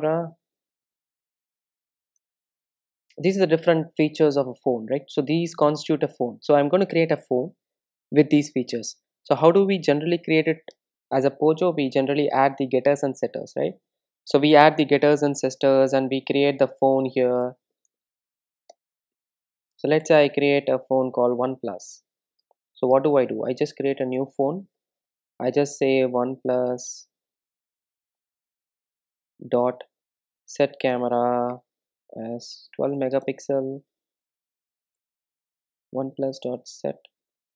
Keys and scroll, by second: 0.2 Return, 10.6 super+n, 18.6 Return, 22.7 Return, 24.8 Return, 29.6 Return, 35.9 Return.